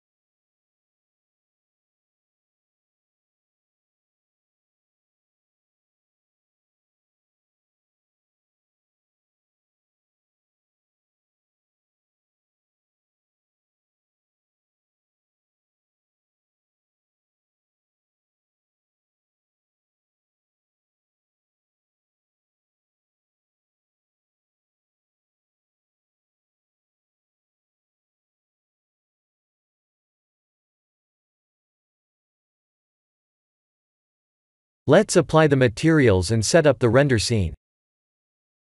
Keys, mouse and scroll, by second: 1.0 click, 1.5 b, 2.4 click, 2.9 b, 3.9 g, 5.3 click, 6.0 b, 7.2 shift+z, 9.5 shift+z, 10.2 click, 10.5 b, 11.6 g, 13.6 click, 13.9 b, 16.0 g, 17.8 Tab, 18.3 shift+z, 19.2 click, 19.5 Tab, 22.1 Tab, 22.4 Tab, 23.2 Tab, 24.5 shift+z, 24.8 scroll up 5, 25.4 shift+middle click, 26.0 Tab, 26.4 click, 26.7 b, 27.6 g, 28.7 click, 28.9 b, 29.6 g, 31.3 click, 31.5 Tab, 32.1-32.7 scroll down 6, 33.1 shift+z, 33.7 middle click, 36.6 click, 38.2 click.